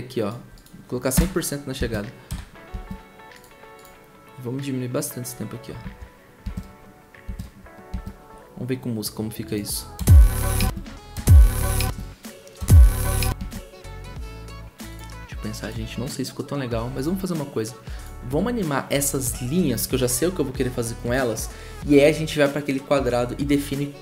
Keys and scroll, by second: 1.1 0, 2.3 0, 3.9 typing, 5.7 0, 7.4 typing, 9.9 0, 11.1 0, 12.6 0.